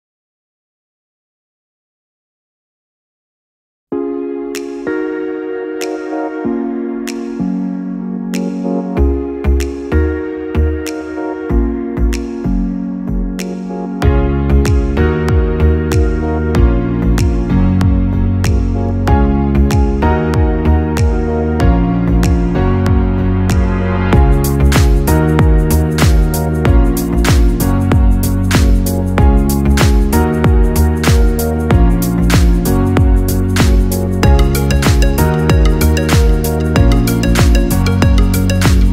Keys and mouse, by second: 0.8 click, 2.4 shift+click, 3.4 j, 8.3-11.1 right drag, 11.1-13.9 drag, 14.7 g, 21.3 click, 22.3 g, 27.5 click, 28.8 shift+click, 30.2-35.1 right drag, 35.1-36.8 drag, 38.1 shift+click, 38.8-38.9 right drag.